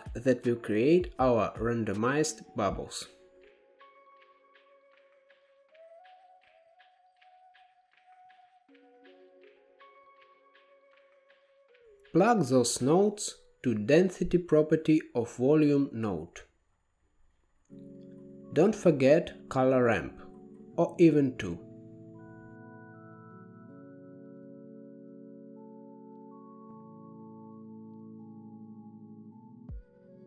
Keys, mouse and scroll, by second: 4.7-5.8 drag, 5.8-6.6 middle drag, 6.6 shift+a, 10.1 click, 11.0-12.4 middle drag, 12.4-15.0 drag, 15.0-17.0 middle drag, 18.1 shift+a, 21.0-21.8 middle drag, 21.8-23.1 drag, 25.7 middle click, 26.1 scroll up 4, 26.2 middle click, 27.1 click, 28.4-29.4 drag, 29.9-30.2 drag.